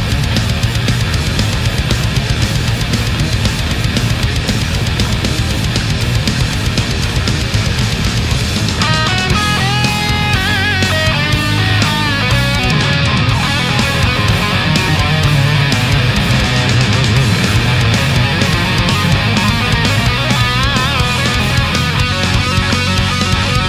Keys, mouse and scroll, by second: 0.7 click, 1.6 right click, 2.6 shift+right click, 3.3-5.1 shift+drag, 5.3 ctrl+z, 6.1 right click, 6.9-8.3 drag, 8.7 scroll up 2, 9.8 right click, 11.1 right click, 11.9-14.1 drag, 14.2 scroll down 2, 16.0 middle click, 16.7 a, 17.5 middle click, 19.7 right click, 20.3 shift+right click, 21.2-21.9 middle drag, 22.3-23.3 drag, 23.4-23.6 middle drag.